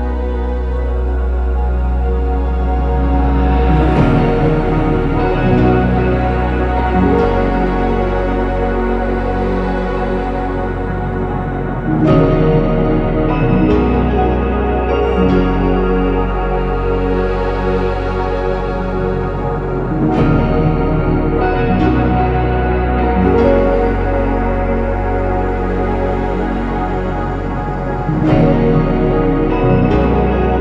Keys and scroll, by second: 2.4 ctrl+c, 2.4 ctrl+v, 7.3-8.1 typing, 9.1 ctrl+c, 9.1 ctrl+v, 14.0 BackSpace, 14.3 BackSpace, 15.9 BackSpace, 16.2 ctrl+z, 19.3 Escape, 21.6-22.4 typing, 25.6 ctrl+c, 28.6 Escape.